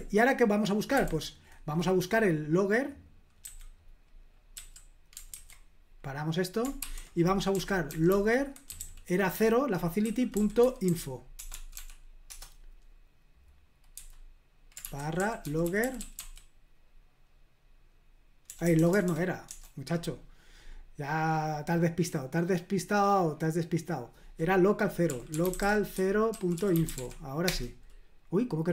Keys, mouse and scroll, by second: 0.9 /, 3.4 q, 4.5 q, 5.3 ctrl+c, 6.8-12.2 typing, 12.3 Return, 13.9-16.7 typing, 18.5-19.5 typing, 21.1-23.9 scroll up 1, 24.8-27.4 typing.